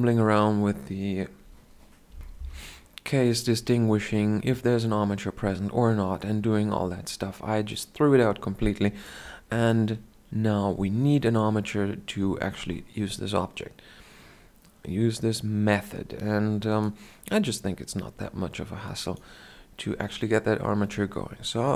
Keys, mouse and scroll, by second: 18.8-21.7 drag.